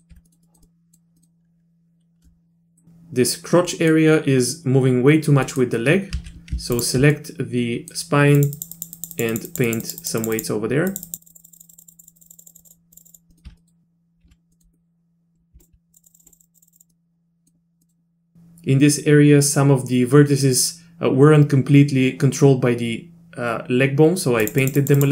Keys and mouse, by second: 0.1 z, 0.3 middle click, 0.4 middle click, 0.6 middle click, 1.2 middle click, 2.2 middle click, 3.7 middle click, 5.5 middle click, 6.1 z, 6.8 ctrl+click, 7.1 middle click, 8.4 click, 8.6 click, 8.7 click, 9.0 click, 9.1 click, 9.3 click, 9.5 click, 9.7 click, 9.8 click, 10.0 click, 10.2 click, 10.4 click, 10.9 click, 11.1 click, 11.2 click, 11.3 click, 11.4 click, 11.5 click, 11.6 click, 11.7 click, 11.8 click, 11.9 click, 12.2 click, 12.3 click, 12.3 click, 12.5 click, 12.9 click, 13.0 click, 13.1 click, 13.3 middle click, 13.5 z, 13.6 middle click, 14.2 z, 14.5 middle click, 14.7 middle click, 15.9 click, 16.0 click, 16.1 click, 16.2 click, 16.2 click, 16.3 click, 16.4 click, 16.7 click, 16.9 middle click, 17.8 middle click, 24.6 click, 24.8 click, 25.0 click.